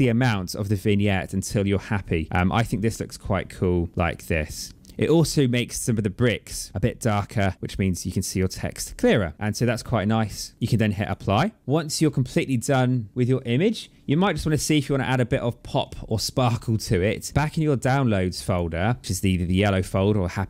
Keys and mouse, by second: 7.2 click, 9.8 click, 10.9 click, 18.3 click.